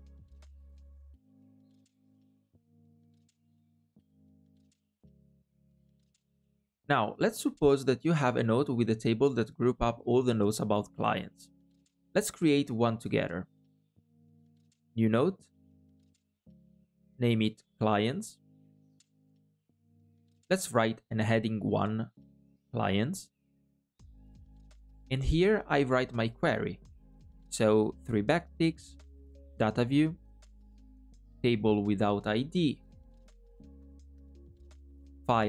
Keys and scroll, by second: 14.8 super+n, 20.8 alt+à, 27.2 alt+\.